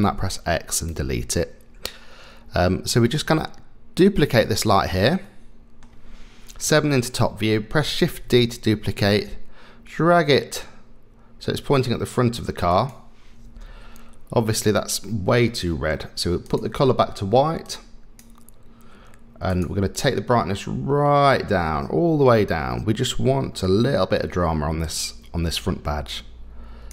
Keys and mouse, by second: 0.0 x, 2.6-3.1 middle drag, 4.2 click, 5.2-5.8 middle drag, 6.6 KP_7, 8.1 shift+d, 13.4 KP_0, 16.4 click, 19.9-26.9 drag.